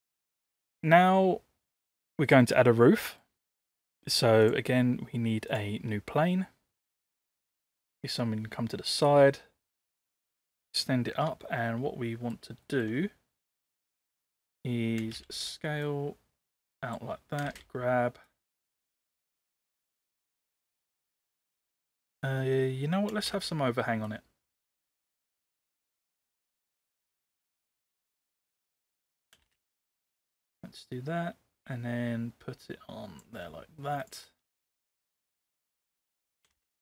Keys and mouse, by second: 0.2-1.0 middle drag, 3.0 middle click, 4.4-6.5 drag, 7.9 click, 9.1-10.5 drag, 12.1 shift+middle drag, 12.6 shift+middle drag, 15.0 space, 17.4 space, 18.3-21.9 drag, 23.1 space, 24.0-27.1 drag, 27.9-28.5 shift+middle drag, 29.4 space, 30.5-33.2 drag, 36.5 space.